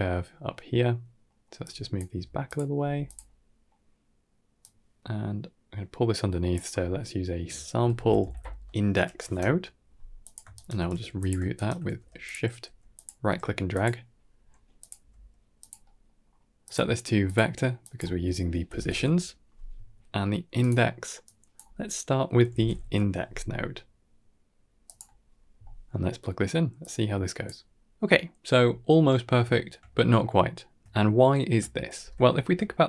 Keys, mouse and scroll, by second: 0.4 middle click, 1.1 middle click, 1.5-1.9 drag, 1.9 g, 2.6 g, 3.1-3.5 middle drag, 4.5-10.2 drag, 10.4 shift+right click, 10.8 g, 11.4 shift+right drag, 11.7 g, 12.5 g, 13.1 g, 14.3 scroll up 2, 14.7 click, 14.9 g, 15.7 middle click, 16.0-16.5 scroll up 3, 16.5-17.2 drag, 17.7-20.5 drag, 21.1-24.8 drag, 25.5 middle click, 25.9 scroll down 2, 26.7-27.3 drag, 28.1-28.5 middle drag, 29.3 shift+middle click, 30.5-30.8 middle drag, 31.5-31.9 middle drag, 31.9 ctrl+space, 32.5 shift+middle click.